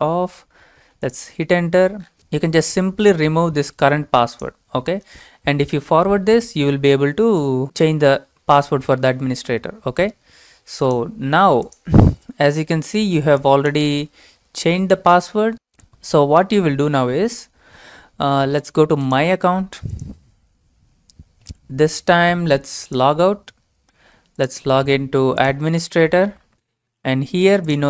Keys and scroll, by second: 5.3 BackSpace, 14.0 BackSpace, 14.8 Return, 25.4-27.8 typing.